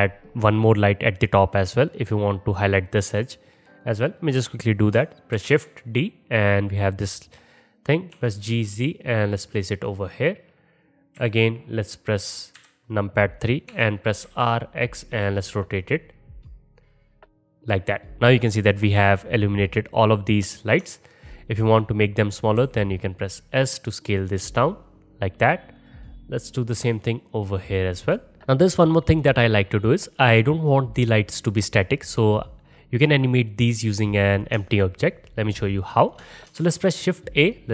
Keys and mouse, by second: 3.8 click, 5.4 shift+d, 11.1 KP_1, 12.6 KP_3, 13.7 r, 17.6 click, 17.8-22.1 middle drag, 22.1 click, 22.2-24.4 middle drag, 22.6 s, 24.4 click, 24.4-25.7 middle drag, 25.7 click, 26.0 middle click, 26.8 s, 28.0 click, 32.7-36.2 middle drag, 36.6 shift+a.